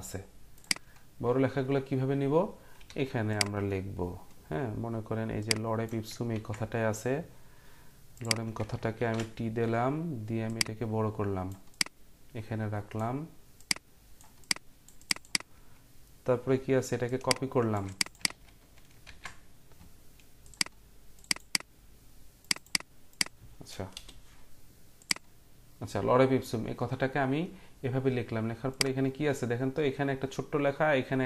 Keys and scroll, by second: 2.7 t, 6.3 ctrl+x, 9.0 ctrl+t, 18.3 ctrl+a, 19.0 ctrl+v, 23.9 BackSpace.